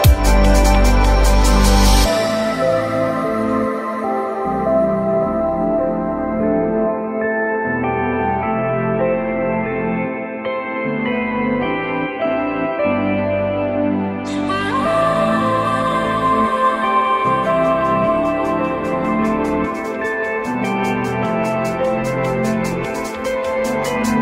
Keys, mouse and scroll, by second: 2.8 alt+middle click, 3.3 alt+middle click, 3.5 r, 11.2 ctrl+i, 12.3 ctrl+z, 16.2 alt+middle click, 19.7 alt+middle click.